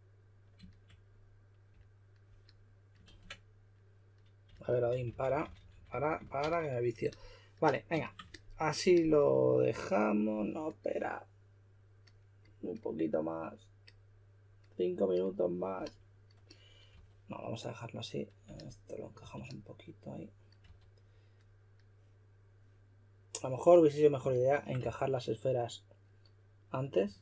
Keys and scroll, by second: 3.0 super+z, 4.2-6.4 typing, 16.9 w, 19.2 q, 20.4-21.1 typing, 24.8 w, 26.8-27.2 typing.